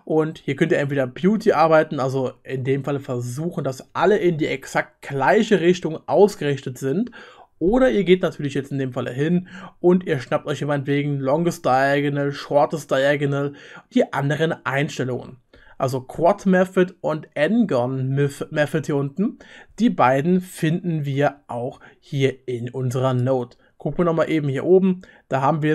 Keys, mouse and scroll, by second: 21.2 ctrl+z.